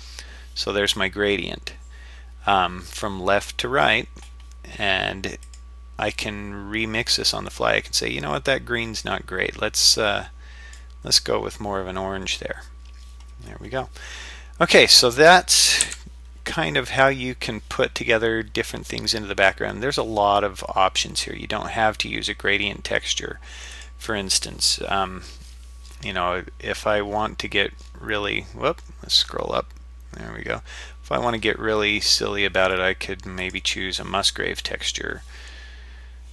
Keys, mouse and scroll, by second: 5.5 click, 14.4 scroll up 1, 15.0-15.9 scroll down 1, 15.9 n, 16.8-18.4 scroll up 1, 23.7-33.5 drag.